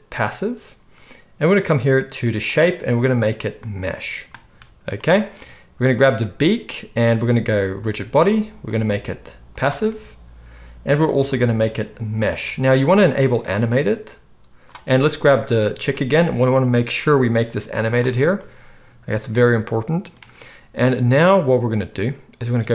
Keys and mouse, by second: 5.9-7.7 middle drag, 7.7-13.5 drag, 13.5-15.1 middle drag, 15.1 click, 15.2-17.3 middle drag, 17.3 click, 17.4-22.4 middle drag, 22.4-22.7 drag.